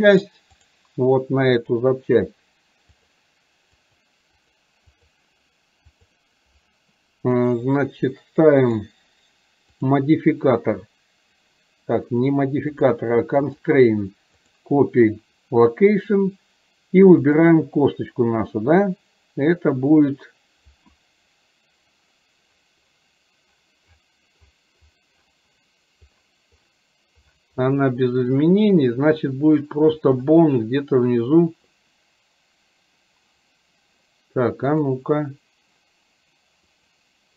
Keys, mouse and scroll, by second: 0.3 click, 1.6 click, 3.1-3.9 drag, 4.5 click, 6.0 drag, 8.6 click, 10.0-11.5 drag, 13.5-14.6 drag, 17.4-37.0 drag.